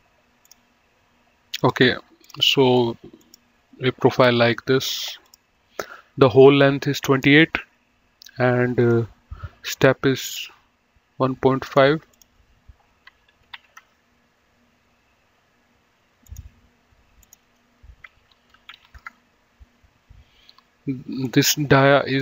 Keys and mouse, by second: 0.6 click, 1.8 click, 3.0 right click, 3.5 click, 5.6 click, 9.2 click, 10.6 click, 11.8 click, 13.6 KP_2, 14.1 KP_Enter, 16.5 click, 18.7 KP_1, 18.9 KP_Decimal, 19.1 KP_5, 19.3 KP_Enter, 21.6 click.